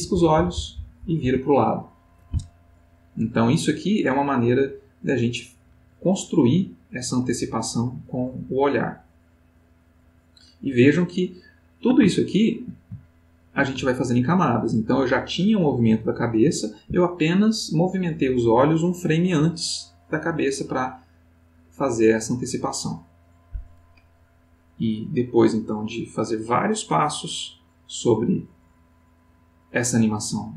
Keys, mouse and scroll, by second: 3.2-10.5 drag, 11.0-11.9 ctrl+middle drag, 12.4 shift+middle click, 13.4 ctrl+middle click, 20.4-29.9 drag.